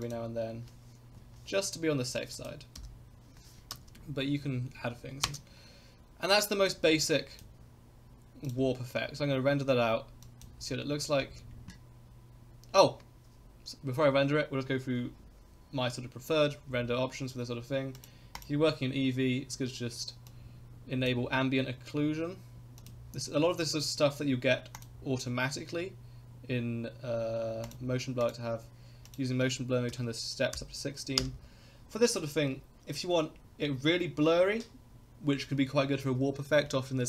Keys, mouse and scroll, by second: 0.0 click, 1.2 Left, 2.3 click, 2.7 i, 3.7 space, 5.3 space, 6.7-7.5 drag, 8.5 click, 10.3 click, 11.2 space, 11.7 click, 18.0 click, 18.3 click, 20.3-21.1 drag, 22.8 click, 24.8 click, 27.7 click, 28.2 click, 29.0-31.8 drag.